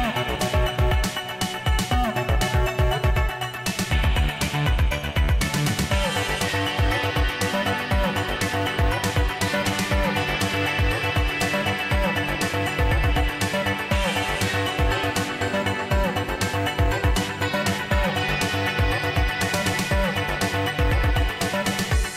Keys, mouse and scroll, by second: 2.3 click, 4.7 click, 6.3 ctrl+r, 7.9 click, 9.5-14.3 typing, 14.3 Tab, 15.6-16.9 typing, 19.0 click, 22.1 click.